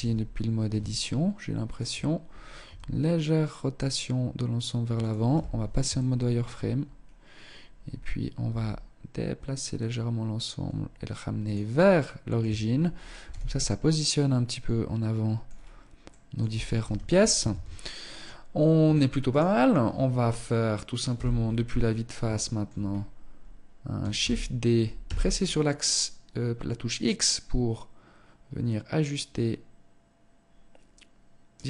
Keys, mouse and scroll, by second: 0.1 shift+middle click, 1.8 r, 4.4 z, 5.0 shift+middle click, 5.8-6.4 scroll up 3, 6.9-7.5 scroll down 2, 7.6 g, 10.9 middle click, 11.6 Tab, 11.8-12.3 scroll down 4, 12.3 z, 12.7 middle click, 14.5-14.9 scroll down 2, 15.2 middle click, 15.9 KP_0, 16.6 ctrl+s, 18.5 right click, 20.2 KP_1, 20.9-21.3 scroll up 3, 21.5 shift+middle click, 21.9 scroll up 2, 22.5 scroll down 1, 23.3 shift+d.